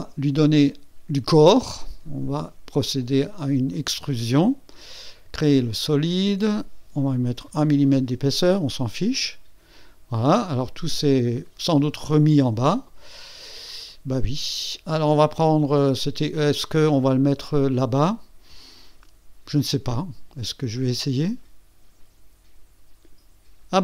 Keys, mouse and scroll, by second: 0.0 click, 0.5 click, 1.4 click, 1.9 click, 3.7 click, 7.5 KP_1, 9.1 click, 10.4-13.6 drag, 15.3 click, 17.2 click, 17.6 click, 20.7 click, 21.6-23.3 drag.